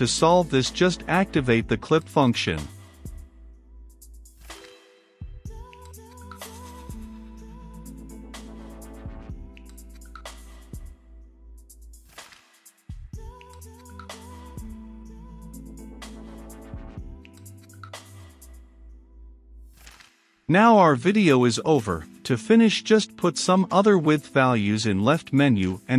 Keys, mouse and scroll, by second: 5.2-6.3 right drag, 6.3-18.3 drag, 18.3 middle click, 18.9-21.8 drag, 21.9-22.5 typing, 22.7 Return, 23.6-25.0 drag, 25.1-25.9 drag.